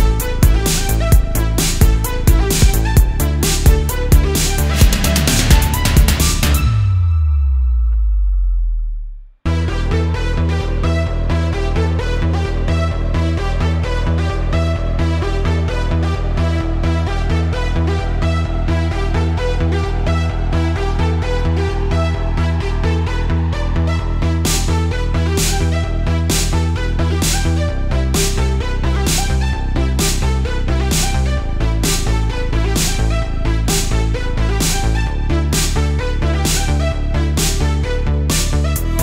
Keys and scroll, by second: 3.5 space, 5.7 space, 8.7 space, 9.7 super+space, 10.1 super+space, 10.4 super+space, 13.2 space, 17.1 space, 21.0 space, 22.3 space, 22.7 space, 25.8 super+z, 30.3 space, 35.0 space, 35.5 space, 36.3 super+space, 38.5 space.